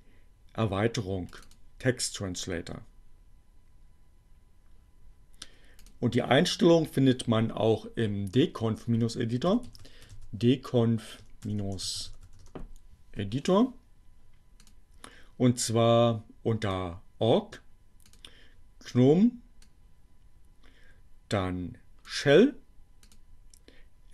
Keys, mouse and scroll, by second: 0.3-1.7 drag, 5.5 click, 8.3 c, 9.6-11.1 typing, 12.1 Return, 14.6 click, 16.4 click, 17.5 click, 19.5-22.2 drag, 22.9 click, 23.8 click.